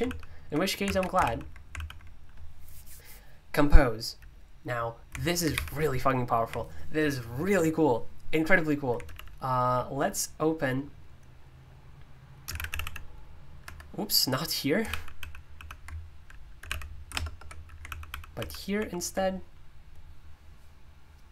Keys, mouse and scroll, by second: 0.0 super+l, 0.8 alt+d, 1.2 super+l, 1.7 super+l, 5.5 alt+super+i, 9.0 super+u, 12.4-13.3 typing, 13.6 Escape, 14.8 super+l, 15.1 super+l, 16.3-17.1 typing, 17.3 ctrl+BackSpace, 17.9 super+l, 18.1 super+l, 18.7 super+l.